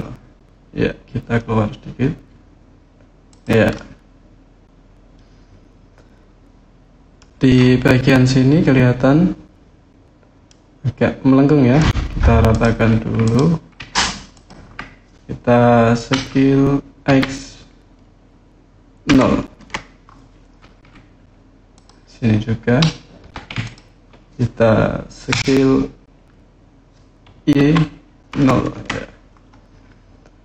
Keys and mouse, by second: 3.1 click, 3.5-7.0 middle drag, 10.2-11.5 middle drag, 12.3 click, 14.1 ctrl+click, 16.9 x, 18.9 KP_0, 19.4 KP_Enter, 21.5 click, 23.4 ctrl+click, 27.3 y, 28.1 KP_0, 28.5 KP_Enter.